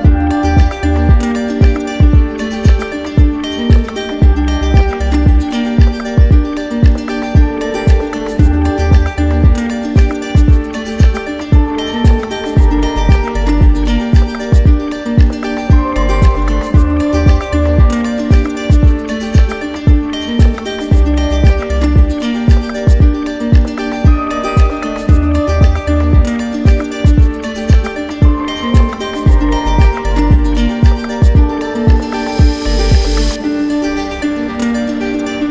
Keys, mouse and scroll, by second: 0.2 right click, 0.8 right click, 1.5 alt+click, 2.4 alt+click, 3.6 z, 4.4 click, 5.2 right click, 6.1 click, 6.9 right click, 7.9 right click, 9.7 click, 10.3 ctrl+z, 11.5 click, 12.3 right click, 13.1 right click, 13.9 right click, 15.4 click, 16.4 click, 17.4 click, 18.3 click, 19.2 click, 20.8 click, 25.6 right click, 27.2 click, 28.8 right click, 29.4 right click, 30.6 right click, 31.6 click, 32.3 click, 32.8 click, 33.3 click, 33.6 click, 34.0 click, 34.5 click, 34.9 click.